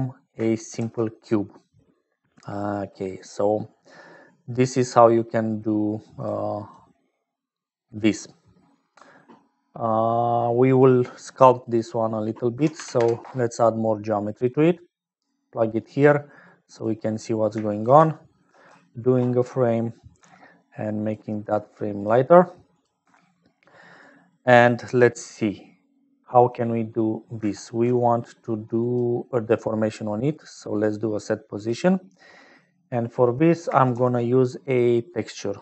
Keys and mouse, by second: 0.0-35.6 typing, 0.2 click, 7.5 click, 8.3 click, 11.7-13.5 drag, 15.8-17.0 drag, 17.7 shift+click, 18.4 ctrl+j, 21.3 click, 22.7 click, 24.1 click, 24.7 click, 25.6 click, 32.3 click.